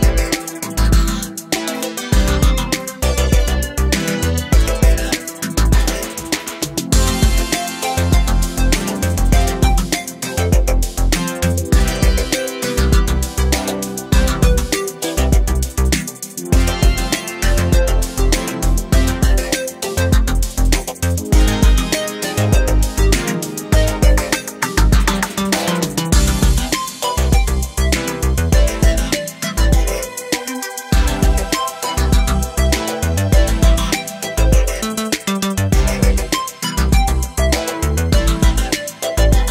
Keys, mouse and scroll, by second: 0.0 middle click, 1.0 3, 1.1 click, 1.7 s, 3.3 middle click, 3.8 scroll down 1, 4.0 middle click, 4.5 KP_7, 5.4-6.9 scroll up 2, 6.9 middle click, 7.3-8.0 scroll up 1, 8.2 ctrl+r, 10.4-11.4 middle drag, 11.4 scroll up 1, 11.6 middle click, 12.0 3, 12.3 click, 13.0 i, 16.7 middle click, 16.9 e, 18.5 scroll down 1, 18.7 shift+middle click, 19.5 Tab, 19.7-22.6 drag, 22.6-23.2 middle drag, 23.2 scroll up 1, 23.5-24.1 middle drag, 24.1 scroll up 1, 24.3-25.0 middle drag, 25.0 scroll down 4, 25.3 middle click, 25.5 scroll up 2, 25.7 Tab, 26.0-26.6 scroll down 1, 26.6 scroll up 1, 27.2 shift+middle click, 28.0 click, 28.7 shift+middle click, 29.6 ctrl+r, 33.7-35.9 middle drag, 35.9 ctrl+r, 38.4 Tab, 38.6-39.5 right drag.